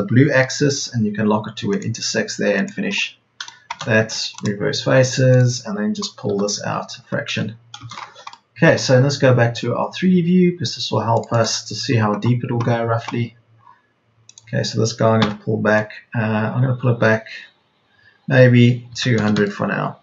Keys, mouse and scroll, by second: 0.5 Up, 5.2 Escape, 6.2 p, 8.1 Escape, 9.9 Escape, 15.1 p, 18.9 KP_2, 19.1 KP_0.